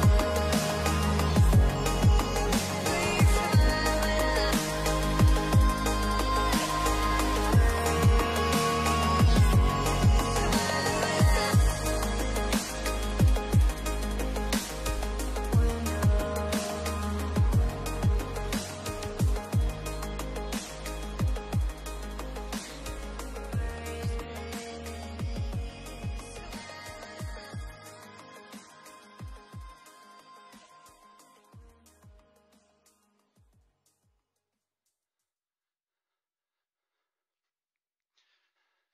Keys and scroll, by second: 1.1 space, 3.1 space, 6.1 space, 13.0 space, 15.9 space, 22.1 space, 26.6 space, 30.0 space, 33.6 space, 38.0 space.